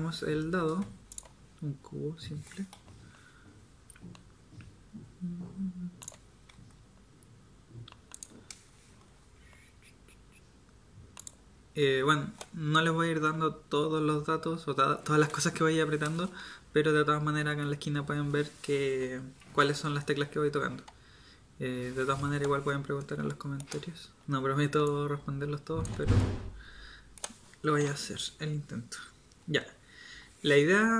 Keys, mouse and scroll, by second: 2.7 g, 6.5 s, 9.2 g, 23.4-26.2 middle drag, 26.2-27.8 drag, 27.8 KP_7.